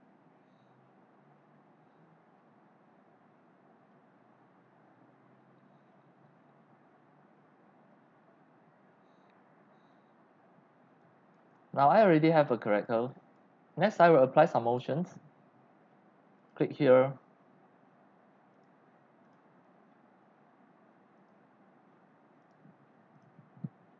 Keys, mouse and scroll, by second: 19.2 click, 21.1 click, 22.4 right click, 23.1 click.